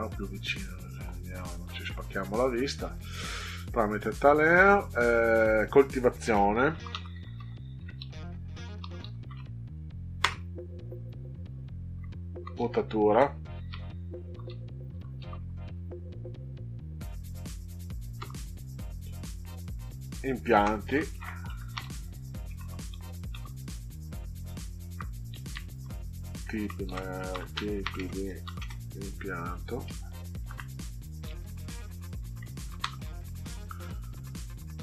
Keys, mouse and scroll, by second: 0.7 ctrl+scroll up 2, 6.4-9.8 typing, 10.1 Return, 13.0-16.1 typing, 18.1 Return, 20.6-23.3 typing, 24.1 Left, 25.3 Right, 25.5 Right, 26.6-28.9 typing, 29.7 Delete, 30.3 o, 30.5 Right, 30.7 Right, 30.8 Right, 31.2 Right, 32.6 o, 32.7 Delete.